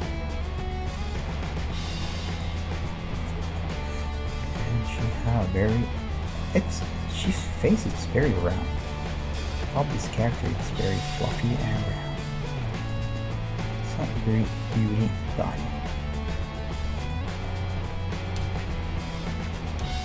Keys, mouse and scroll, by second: 0.0 g, 1.4 g, 4.1-6.3 right drag, 5.4 g, 8.0-14.3 right drag, 8.7 g, 9.8 middle click, 10.0 g, 10.7-14.7 middle drag, 13.0 g, 15.4-16.8 middle drag, 16.8-19.1 right drag, 18.4 KP_3, 18.7 KP_5, 19.1 middle click, 19.5-20.0 scroll down 1, 19.8 KP_5.